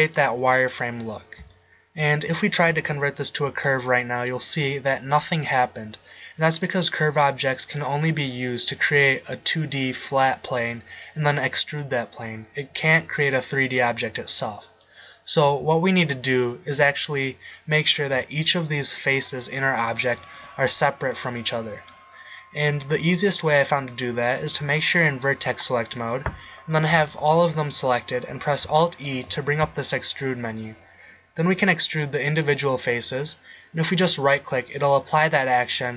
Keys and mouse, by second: 2.8 alt+c, 11.4-12.9 middle drag, 18.2 Tab, 19.4 click, 19.9-21.0 right drag, 20.4 g, 21.1 click, 25.9-26.9 middle drag, 26.9 a, 27.1 a, 29.2 alt+e, 34.5-35.9 drag.